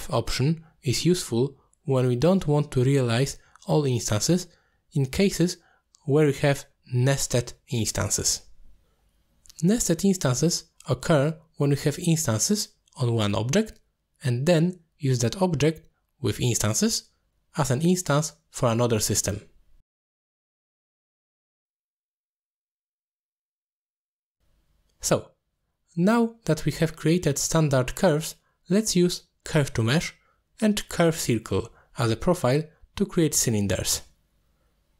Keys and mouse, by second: 4.5-4.9 middle drag, 5.9 middle click, 6.7 alt+shift+click, 7.3 middle drag, 7.9 middle click, 8.3 alt+shift+click, 8.7 middle click, 9.6 middle click, 10.2 alt+shift+click, 10.6 middle click, 11.8 alt+shift+click, 14.9 middle drag, 15.6 click, 16.5 middle click, 18.3 shift+middle drag, 20.5 click, 21.1 click, 22.7 click, 24.2 click, 25.1 click, 26.4 click, 28.5 middle click, 29.7-33.4 drag, 33.6 alt+shift+click, 33.9 middle click, 34.6-34.9 drag.